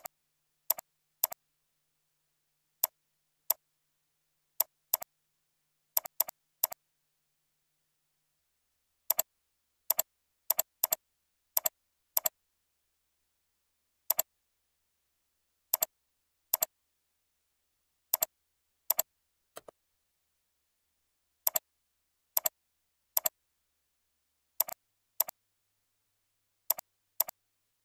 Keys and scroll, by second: 1.6 ctrl+shift+., 2.5 ctrl+b, 5.0 ctrl+a, 5.7 ctrl+e, 7.2 ctrl+e, 25.8 ctrl+x, 27.6 ctrl+v.